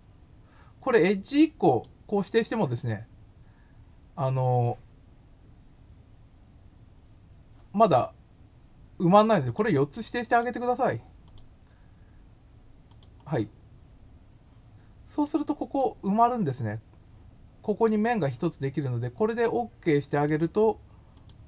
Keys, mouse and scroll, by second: 1.6 click, 9.4 click, 10.2 click, 11.2 click, 12.9 click, 15.2 middle click, 19.4 middle click, 19.6 scroll, 21.1 click.